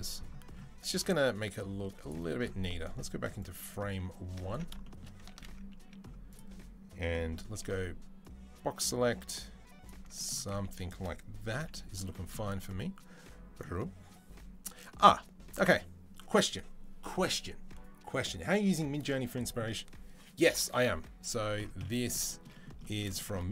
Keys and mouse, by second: 3.2 click, 4.3 ctrl+s, 5.1 ctrl+a, 5.3-7.2 drag, 7.3 b, 10.3-23.5 drag, 11.3 c.